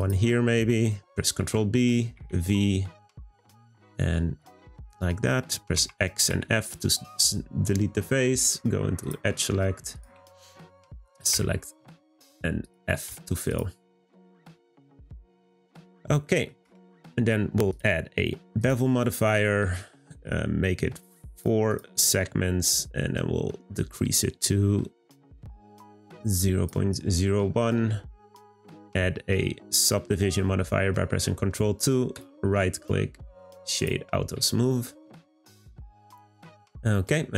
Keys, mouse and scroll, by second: 0.0 click, 1.4 b, 4.8-5.7 scroll up 1, 5.7 x, 6.8-9.0 scroll up 2, 9.0-10.0 drag, 10.6 shift+click, 11.3 f, 11.8 click, 12.6 shift+click, 13.1 f, 13.4 click, 13.8 scroll down 3, 14.2-15.7 middle drag, 15.7-16.2 scroll down 3, 16.2 middle click, 16.6 Tab, 17.7-19.4 drag, 19.4-19.7 middle drag, 19.7-21.3 scroll up 1, 21.3-25.8 drag, 27.3-28.6 middle drag, 28.6 ctrl+2, 32.1-33.8 right drag, 33.8 click, 34.2-34.6 scroll down 1, 34.6-35.4 middle drag, 35.4-35.9 scroll down 2, 36.0-37.3 middle drag.